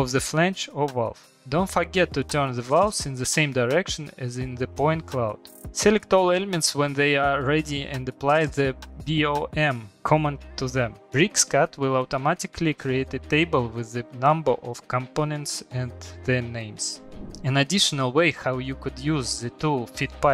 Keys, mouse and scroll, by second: 0.5 Escape, 1.3 click, 1.7 click, 3.1 Escape, 3.3 click, 4.0 click, 4.7 click, 5.5 click, 8.0 typing, 8.5 click, 9.7-10.3 scroll, 11.5 click, 12.6 middle click, 12.7 middle click, 14.0 click, 17.6 middle click, 18.2 click, 19.0 middle click, 19.1 middle click, 19.9 middle click, 20.0 middle click, 20.1 middle click, 20.2 middle click, 20.2-20.3 scroll.